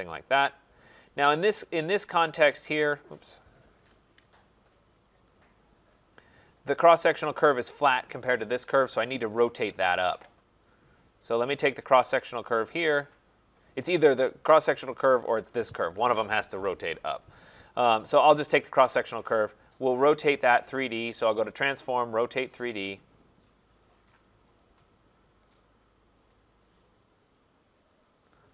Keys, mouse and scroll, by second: 0.0 click, 1.6 right click, 2.7 right click, 3.7 Return, 4.8-5.2 scroll, 5.6 middle click, 6.4 right click, 11.0 click, 12.4 click, 15.3 click, 18.0 click, 19.1 click, 21.6 click, 22.9 click, 24.6 click, 25.5 click, 26.4 click, 27.9 click.